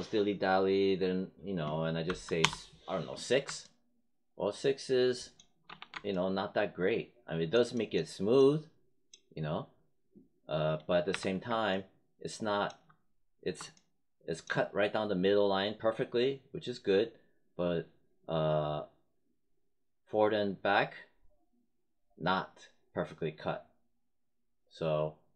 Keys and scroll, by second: 2.0 6, 2.3 Return, 5.6 3, 11.0 1.